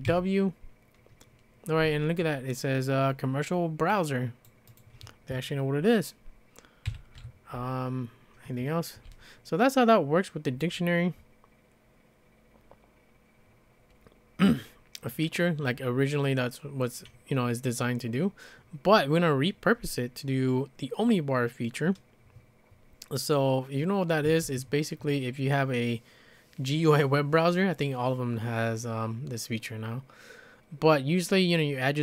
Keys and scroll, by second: 0.0-0.6 typing, 6.9-9.2 typing, 10.4 typing, 24.2 `.